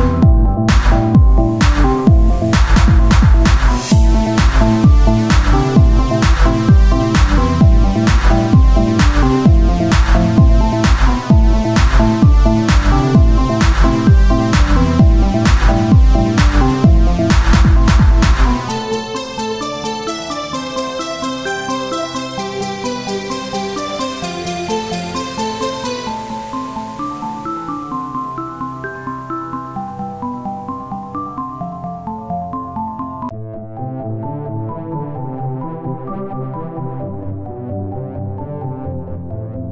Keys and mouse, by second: 4.3-7.9 drag, 6.7 shift+a, 8.3 KP_1, 9.1 s, 10.7 s, 11.3-16.9 drag, 16.9 s, 18.1 KP_1, 20.3-21.9 drag, 21.9 Tab, 22.8 Tab, 23.1 ctrl+a, 23.8 Tab, 24.1 click, 24.7 ctrl+b, 27.3 Tab, 28.2 KP_1, 29.6 Tab, 30.0-31.0 drag, 31.2 Tab, 31.8 KP_1, 34.6-35.8 drag, 36.4-38.5 drag, 38.5-39.7 right drag.